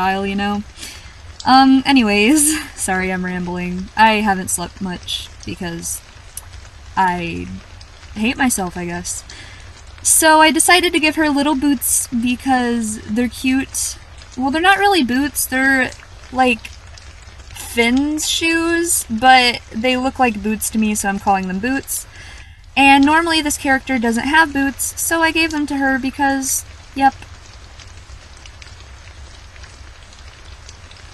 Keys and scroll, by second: 1.3-1.7 scroll up 1, 2.8-3.2 scroll up 1, 4.0 scroll down 1, 8.7-9.0 scroll down 1, 10.5 scroll up 1, 10.7-11.1 scroll down 1, 11.7-12.2 scroll down 1, 13.6-14.1 scroll up 1, 14.9 scroll down 1, 15.9-16.3 scroll down 1, 21.2-21.5 scroll down 1, 21.5 scroll up 1, 21.8-22.2 scroll down 1, 24.3-24.7 scroll down 1, 26.2-26.6 scroll down 1, 26.7-27.4 scroll up 1, 29.5-30.1 scroll down 1.